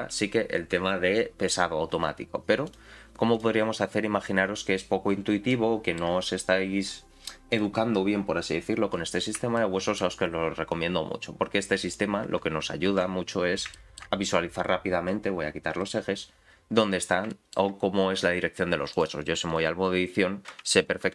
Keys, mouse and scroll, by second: 2.6 click, 3.3 click, 5.5 middle click, 7.5 click, 8.9-9.4 scroll up 3, 9.6 shift+middle click, 12.9 shift+h, 13.2-13.7 scroll down 4, 13.7 shift+middle click, 15.7 click, 17.3 shift+middle click, 18.9 click, 20.9 alt+h.